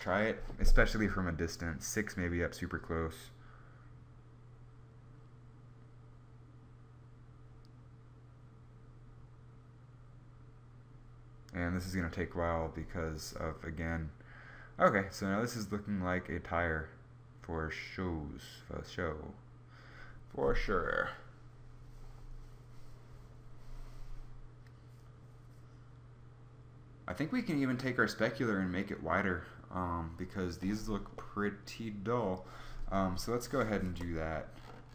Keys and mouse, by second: 32.7 Escape, 33.6 KP_0.